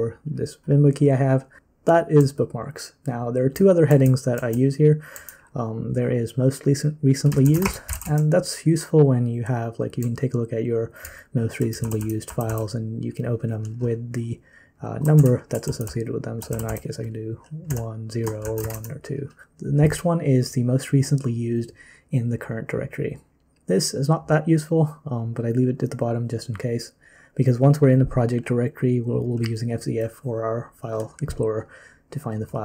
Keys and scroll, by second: 1.6 ctrl+n, 1.6-5.1 typing, 7.2-8.4 typing, 10.0-12.5 typing, 15.2 ctrl+d, 15.7 k, 15.9 k, 16.5 k, 16.7 k, 17.7-19.9 typing.